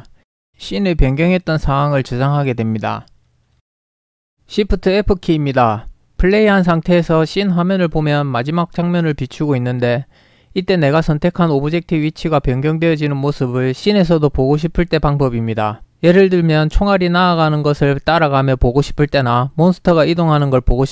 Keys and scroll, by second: 1.9 ctrl+s, 5.2 ctrl+p, 12.1-15.2 typing, 16.9-19.9 typing.